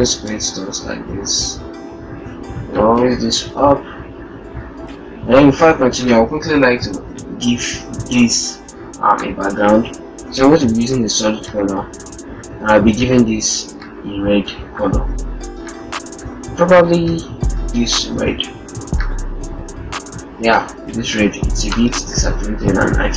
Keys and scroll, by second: 0.2 shift+Up, 1.6 shift+Up.